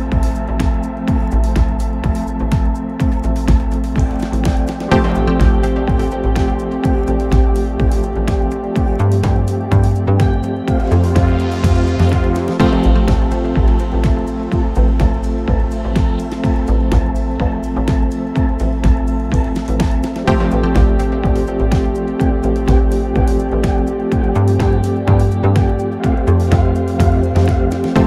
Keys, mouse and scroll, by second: 2.6-4.4 drag, 18.0-20.0 drag, 24.7-26.6 drag, 28.0 click.